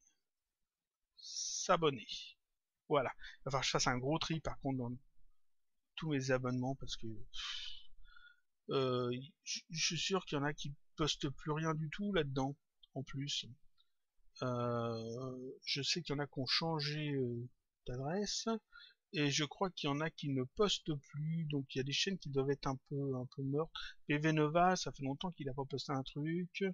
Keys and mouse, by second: 0.3 click, 1.6 click.